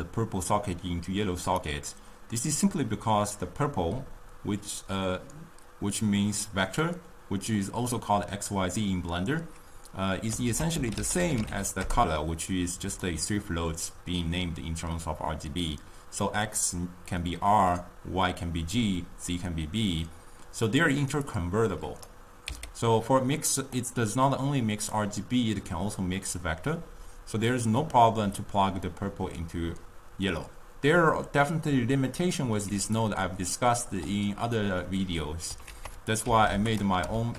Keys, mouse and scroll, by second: 1.7 click, 10.7 ctrl+a, 21.5-22.6 drag, 22.6 x, 23.8 click, 32.7 d, 33.1-33.6 drag, 33.6-34.1 d, 35.7 ctrl+a.